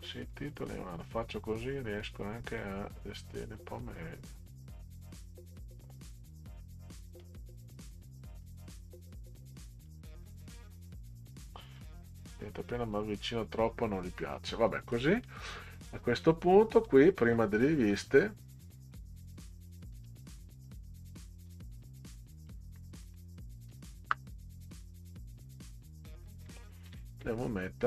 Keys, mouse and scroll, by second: 2.6-3.6 drag, 4.9 click, 7.2-8.4 drag, 9.8 click, 11.8 click, 13.8 click, 15.2 click, 15.5 click, 16.8 click, 19.4 click, 20.5 click, 20.7 click, 22.4 click, 22.6 Left, 22.9 Left, 24.0 Return, 25.3 Up, 26.9 ctrl+v.